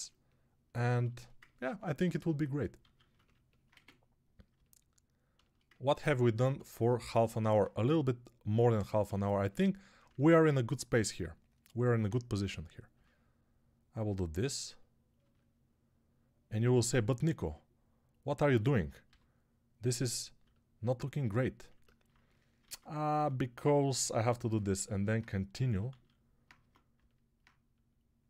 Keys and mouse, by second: 2.7 alt+q, 8.9-28.2 middle drag, 8.9 2, 12.8 e, 18.9 g, 22.5 ctrl+Tab, 23.0 q, 25.8 alt+q, 26.4 Tab.